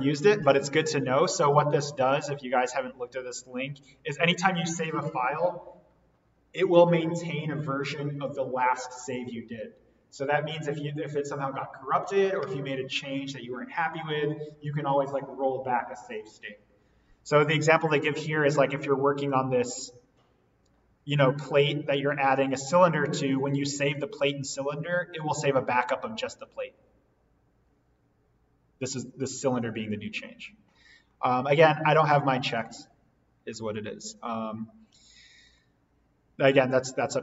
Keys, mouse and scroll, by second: 2.5 click, 3.8-5.6 scroll up 1, 32.8-33.3 scroll down 1, 35.4 click, 37.0 click.